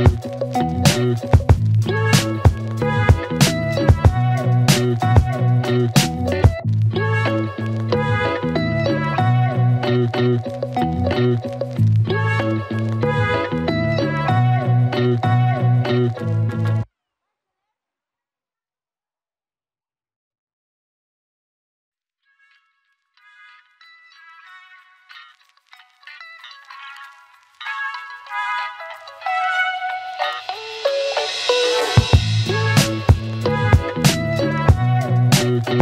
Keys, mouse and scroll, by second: 1.1 shift+click, 2.7 Return, 4.1-5.7 click, 9.0 Return, 13.1 click, 18.4 click, 24.6-29.2 drag, 32.1 click, 32.7 shift+click.